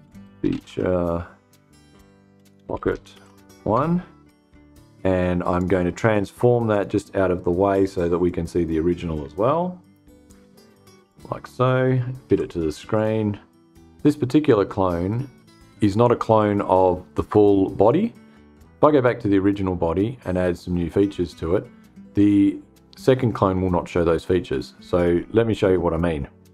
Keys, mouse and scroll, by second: 0.0-0.6 typing, 1.6-3.5 typing, 5.0 click, 6.2 click, 7.7-9.6 drag, 10.6 click, 11.5-12.3 typing, 12.4 click.